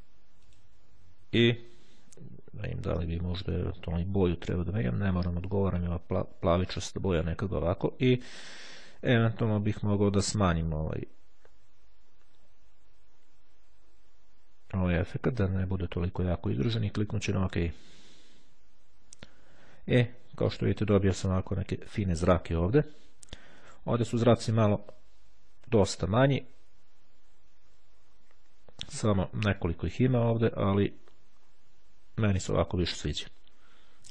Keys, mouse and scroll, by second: 1.4-1.9 ctrl+scroll down 1, 2.8-3.4 ctrl+scroll up 2, 3.6-4.2 ctrl+scroll down 2, 4.2 ctrl+scroll down 1, 6.6-7.4 ctrl+scroll down 2, 10.2 click, 16.8 click, 23.6 click, 26.1-26.6 ctrl+scroll up 2, 27.3-28.8 scroll up 2, 30.7-32.1 scroll down 2, 32.7 click.